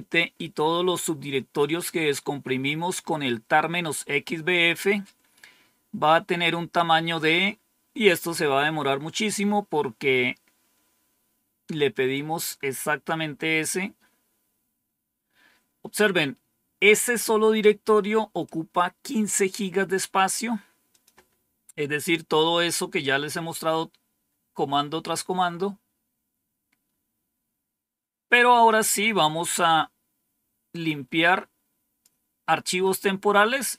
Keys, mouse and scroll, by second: 18.3-19.5 drag, 20.8 click, 30.6-32.0 drag, 32.7 right click.